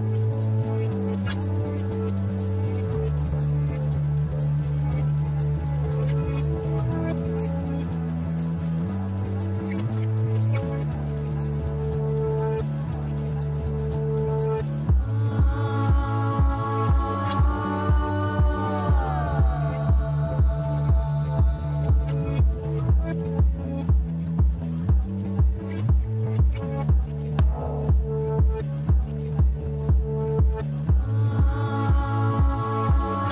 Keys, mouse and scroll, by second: 1.5-1.9 scroll down 1, 1.9-3.1 middle drag, 3.1 scroll up 2, 3.8 Tab, 4.7-6.1 right drag, 6.1-9.2 middle drag, 13.1 drag, 13.8 KP_1, 14.2 Tab, 15.3 click, 15.8 Tab, 16.6-18.5 scroll up 2, 18.5-20.6 scroll down 2, 20.6 click, 22.4 shift+click, 25.4 shift+click, 26.7-27.3 scroll up 1, 27.3 shift+click, 29.6 shift+click, 30.8 shift+click, 32.8 shift+click.